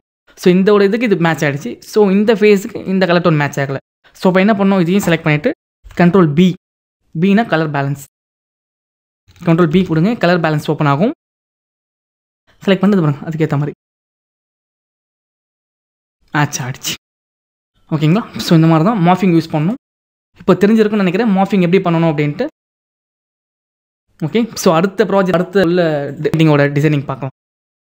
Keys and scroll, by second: 5.9 ctrl+u, 9.7 ctrl+b.